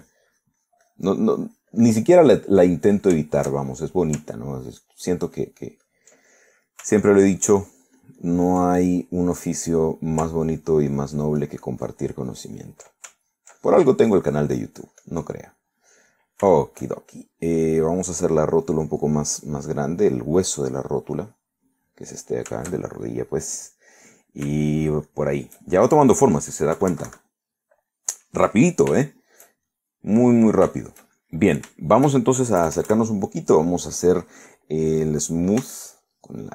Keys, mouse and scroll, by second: 0.3-3.2 drag, 3.3 middle click, 4.7 shift+middle click, 5.6 ctrl+click, 6.6 ctrl+click, 7.5 ctrl+middle click, 8.1-9.7 ctrl+drag, 9.8 ctrl+middle click, 10.4 ctrl+middle click, 11.6-13.9 ctrl+drag, 14.3-16.6 ctrl+drag, 16.6 ctrl+middle click, 17.7 shift+middle click, 18.9-20.2 drag, 20.4-23.1 drag, 23.1 middle click, 23.9 shift+middle click, 25.5 shift+middle click, 26.8 shift+middle click, 27.8 KP_Subtract, 28.5 click, 30.1 shift+click, 30.7-32.2 shift+drag, 32.8 shift+click, 33.7 KP_Add.